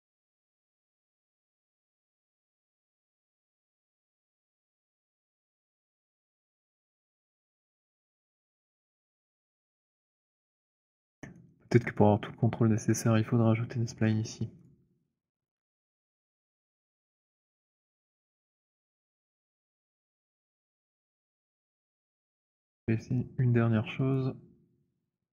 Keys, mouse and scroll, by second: 2.3 w, 2.7 click, 6.2 click, 6.9 alt+middle click, 8.5 alt+middle click, 10.5 alt+click, 11.4 alt+middle click, 11.7 alt+click, 11.7 alt+right click, 14.6 click, 15.3 middle click, 15.5 middle click, 17.0 click, 17.7 alt+right click, 18.9 alt+click, 19.8 alt+middle click, 20.3 alt+right click, 21.2 alt+click, 24.1 right click.